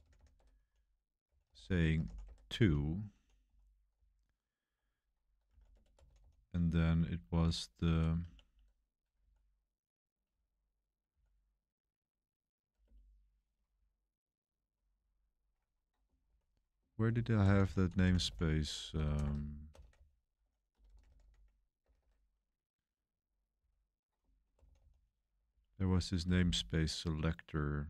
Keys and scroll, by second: 0.0-8.7 typing, 7.0 Page_Up, 7.8 Page_Down, 9.1 Page_Down, 10.2 Page_Up, 10.4 Down, 10.4 Up, 11.0 Down, 12.8 Return, 13.7-21.8 typing, 23.0-27.8 typing, 25.4 Up.